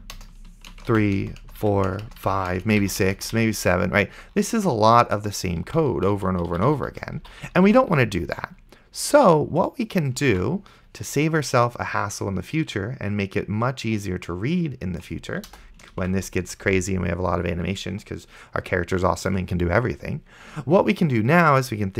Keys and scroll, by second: 0.2 Return, 0.8 Return, 1.2 Return, 1.9 ctrl+v, 1.9 Return, 2.5 ctrl+v, 2.5 Return, 3.1 Return, 3.7 ctrl+v, 6.0 ctrl+z, 10.6 ctrl+s, 15.8 BackSpace, 16.3 ctrl+s.